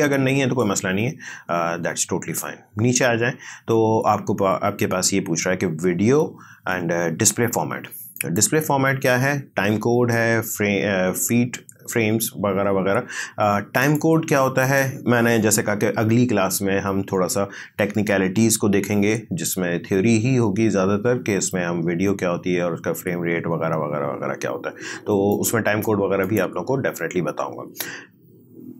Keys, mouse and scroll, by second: 8.2 click, 13.8 click, 25.3 click.